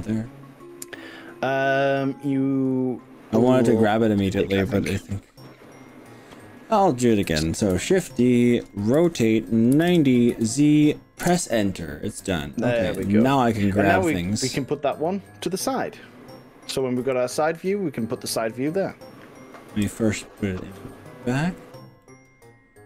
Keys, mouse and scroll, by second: 2.9 click, 7.7 shift+d, 9.1 r, 9.9 9, 9.9 0, 10.3 z, 11.3 Return, 13.0 g, 15.1 z, 19.7 x, 21.7 click, 22.0-22.8 middle drag.